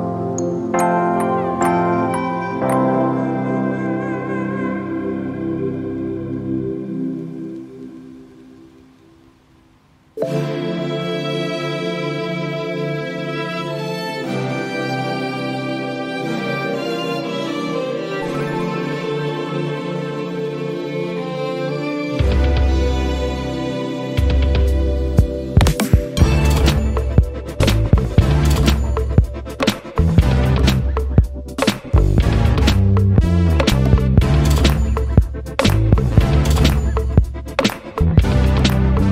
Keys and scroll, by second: 9.3 t.